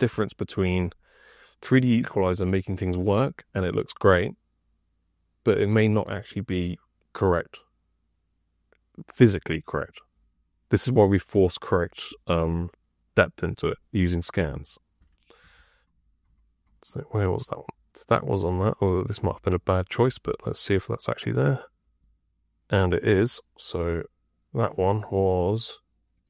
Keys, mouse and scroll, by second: 15.3 F2, 19.2 F5, 20.0 F6.